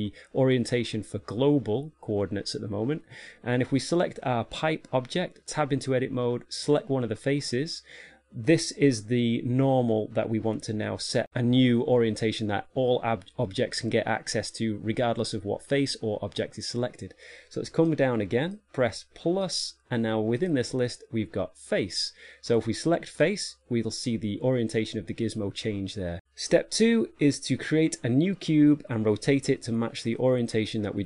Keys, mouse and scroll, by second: 4.6 right click, 5.9 Tab, 7.1 right click, 18.3 click, 19.8 click, 20.9 click.